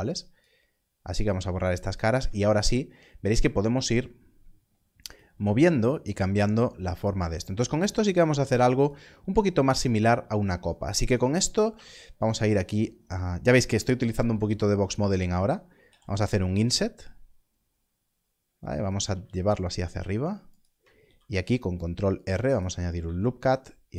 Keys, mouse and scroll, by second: 1.7 alt+click, 3.6 g, 3.7 z, 5.0 click, 8.7 click, 11.6 click, 15.7 click, 18.8 i, 19.0 g, 19.1 z, 20.4 click, 20.9 ctrl+r, 22.1 click, 22.4 right click, 22.9 z.